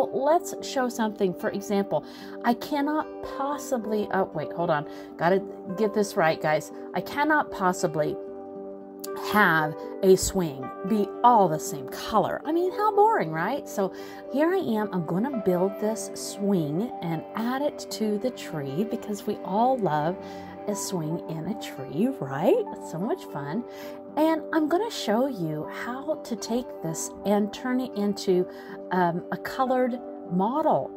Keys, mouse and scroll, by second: 0.0 middle click, 1.3 click, 3.1 click, 3.6 scroll up 1, 4.7 click, 5.5 click, 6.0 middle click, 7.1 click, 7.4 middle click, 8.3 click, 9.2 middle click, 10.0 click, 10.9 click, 12.5 click, 12.8 middle click, 13.8 click, 14.8 middle click, 15.8 middle click, 18.1 a, 19.4 click, 21.2 l, 22.4 click, 23.9 click, 25.5 click, 26.2 scroll up 3, 26.7 shift+middle click, 27.0 scroll down 1, 27.1 middle click, 28.5 shift+middle click, 28.9-29.2 scroll up 2, 29.7 click, 30.8 click.